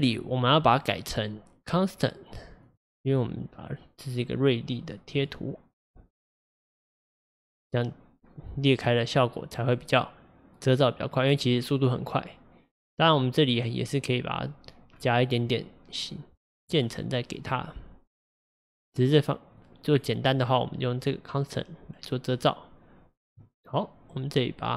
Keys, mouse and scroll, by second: 14.9-16.5 scroll up 4, 19.6-23.1 drag.